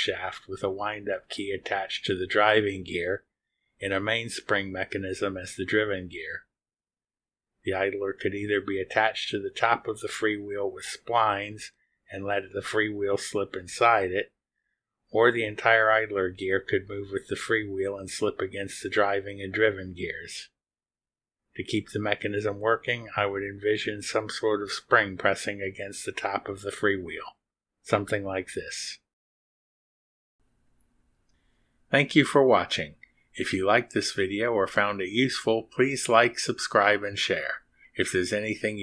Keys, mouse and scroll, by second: 2.8 click, 5.7-7.1 drag.